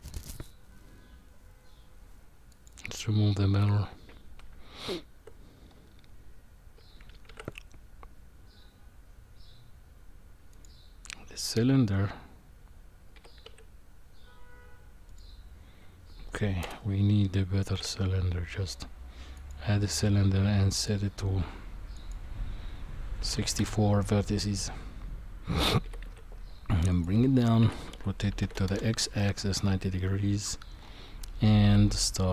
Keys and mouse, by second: 2.6 click, 4.5 Tab, 7.3 shift+a, 13.1 g, 16.6 Delete, 17.7 shift+a, 20.8 click, 22.0-23.6 drag, 25.8 g, 27.6 r, 31.6 s.